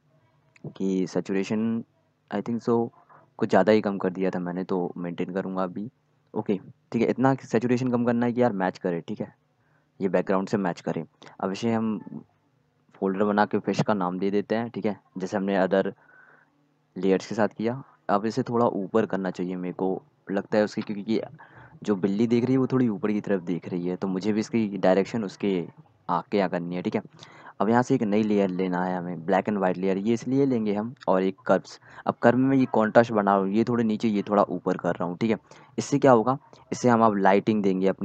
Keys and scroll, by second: 12.8-14.0 typing, 18.0 ctrl+t.